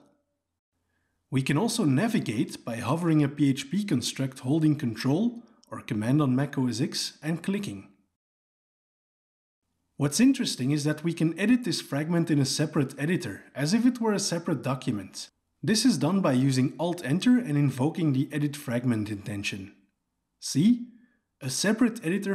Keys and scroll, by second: 0.0 ctrl+space, 1.4 Tab, 16.3 alt+Return, 16.5 alt+Return.